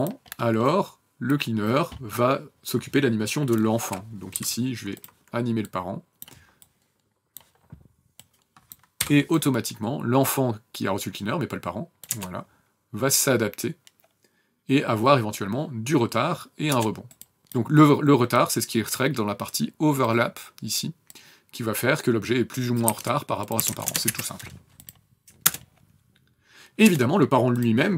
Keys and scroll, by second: 4.2 p, 8.8 n, 11.9 KP_0, 16.5 KP_0, 22.7 KP_1, 23.4 KP_1, 23.5 KP_0, 23.7 KP_0, 23.9 KP_Enter, 25.3 KP_0, 26.7 KP_0.